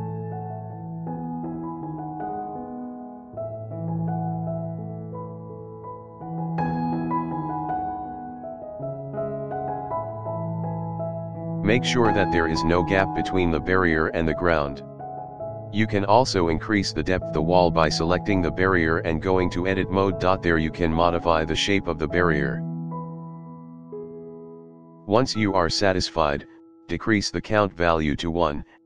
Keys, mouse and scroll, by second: 2.7 scroll up 1, 3.0 shift+middle drag, 3.0 scroll down 1, 3.3-3.7 scroll up 3, 3.9 middle drag, 4.3-4.6 scroll down 3, 4.7 shift+middle click, 5.3 shift+middle click, 6.2-6.7 scroll down 3, 6.9 shift+middle click, 7.6 middle click, 9.2-9.5 scroll down 3, 9.5 shift+middle click, 9.9-10.3 scroll up 3, 10.3 middle click, 11.1 scroll down 1, 11.4-12.2 middle drag, 12.3-12.8 scroll down 2, 13.3-14.9 shift+middle drag, 16.4-17.0 drag, 19.5 click, 22.2-23.4 drag, 24.1 KP_Decimal, 24.7 scroll up 1, 24.9-27.7 middle drag.